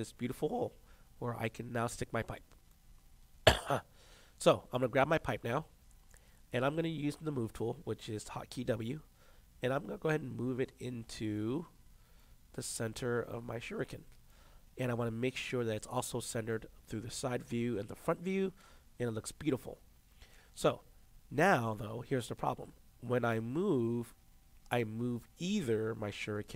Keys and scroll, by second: 8.7 w.